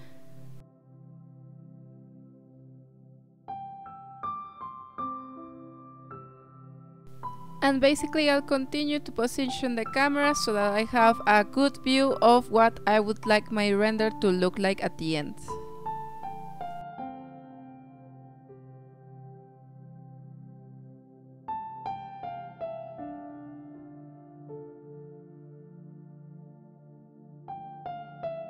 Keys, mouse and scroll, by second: 1.4-1.9 scroll up 4, 1.9-4.4 drag, 4.6-5.0 scroll down 1, 5.0 drag, 5.2-5.5 scroll down 2, 5.5-6.1 drag, 6.8 g, 8.1 click, 9.1 click, 9.5 r, 10.7 g, 11.4 g, 12.5 click, 12.8 g, 13.8 s, 15.0 g, 17.3 click, 17.5 r, 19.0 g, 19.9 click, 20.0 g, 21.3 click, 21.5 q, 22.2 click, 24.2-26.4 drag, 27.5 ctrl+s.